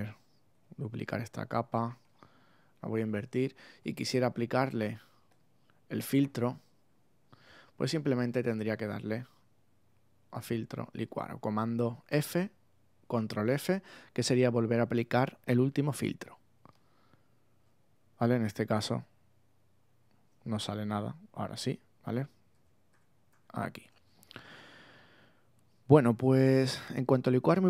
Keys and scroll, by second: 0.5 super+j, 2.0 super+i, 6.9 alt+super+z, 22.1 super+z.